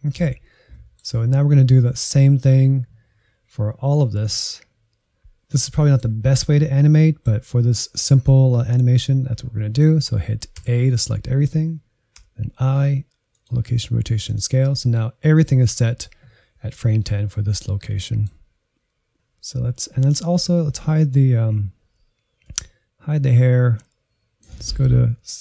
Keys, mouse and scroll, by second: 2.0-4.1 scroll down 2, 4.6-5.1 scroll down 2, 5.1-5.6 scroll up 2, 5.6-10.9 middle drag, 10.9 a, 12.2 i, 14.3-17.3 drag, 17.9-19.6 middle drag, 22.4-25.3 drag, 25.3-25.4 shift+middle drag.